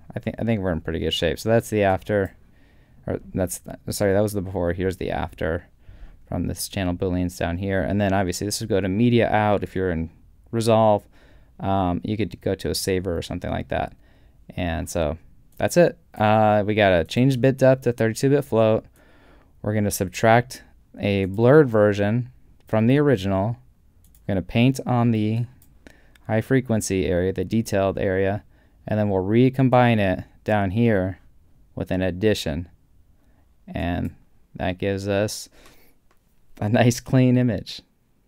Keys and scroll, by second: 0.0 ,, 0.5 super+,.